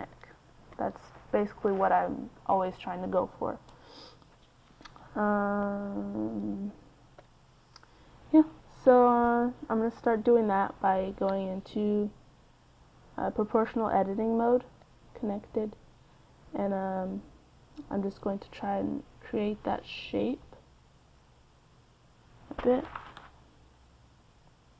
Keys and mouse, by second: 1.3 click, 3.5 n, 4.6 click, 7.9 KP_3, 15.9 a, 24.0-24.7 right drag.